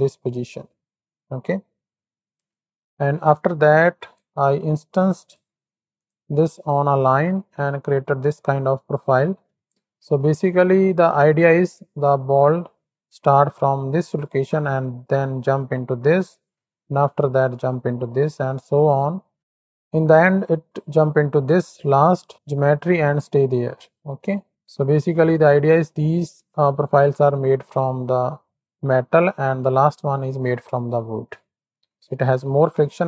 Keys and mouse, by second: 2.6 middle click, 3.3-4.3 drag, 4.6 middle click, 5.0 click, 5.9 ctrl+shift+click, 7.3 click, 7.9 click, 10.3 click, 10.8 shift+middle click, 10.9 shift+click, 22.4 click.